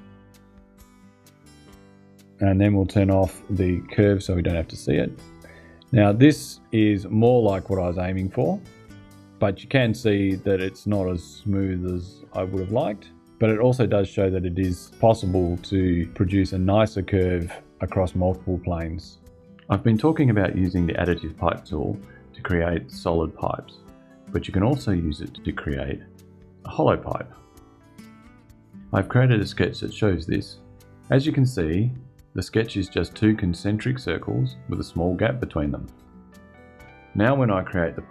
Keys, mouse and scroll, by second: 3.1 click, 3.5 space, 5.2-6.7 drag, 37.1 click.